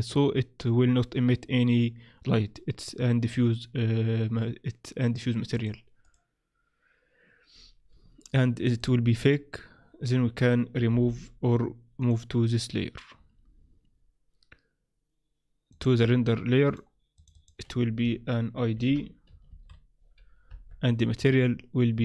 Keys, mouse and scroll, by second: 6.1 click, 8.8 click, 10.9 m, 15.7 click, 16.6 click, 21.2 click.